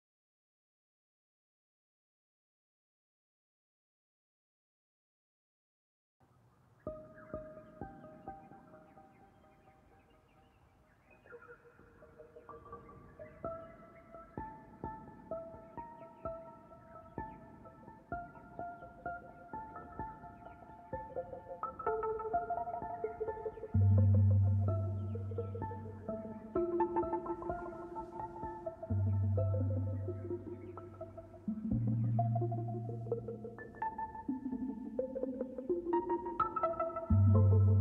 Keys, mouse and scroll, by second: 0.5 Tab, 1.2-1.6 scroll up 4, 5.7 Tab, 7.1 middle click, 8.1 shift+a, 10.0 click, 11.4 scroll up 3, 11.6-13.0 shift+middle drag, 13.0 KP_Decimal, 13.4 scroll up 4, 14.8-15.2 scroll up 2, 15.4 scroll up 1, 15.7-17.3 middle drag, 17.3-19.3 shift+drag, 20.6 a, 21.7 r, 25.3 scroll down 1, 25.5-27.4 shift+middle drag, 27.7 click, 29.4 scroll down 9, 30.1 scroll up 4, 31.1-32.8 middle drag, 32.8 shift+click, 33.4 shift+click, 34.2 r.